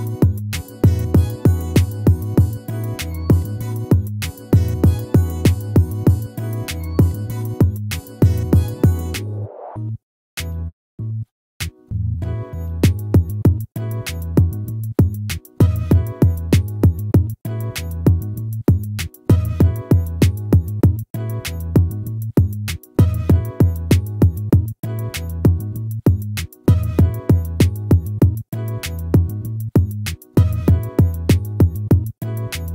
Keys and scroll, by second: 10.1 ctrl+z, 26.6 ctrl+z.